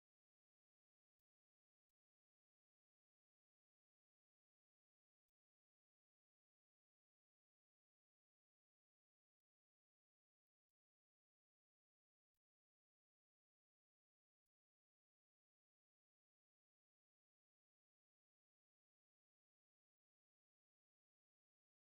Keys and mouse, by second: 3.5 right click, 6.1 ctrl+click, 8.2 ctrl+click, 10.0 right click, 11.7 ctrl+click, 13.0 right click, 13.2 right click, 14.1 ctrl+click, 15.9 right click, 16.2 right click, 16.8 shift+right click, 17.9 f, 18.4 f, 19.4 f, 21.5 middle click.